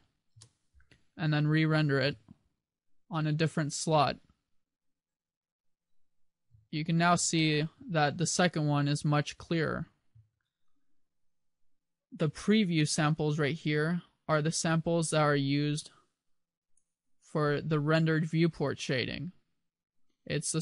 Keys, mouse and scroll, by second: 6.4 2, 7.2 2, 7.2 1, 10.3 1.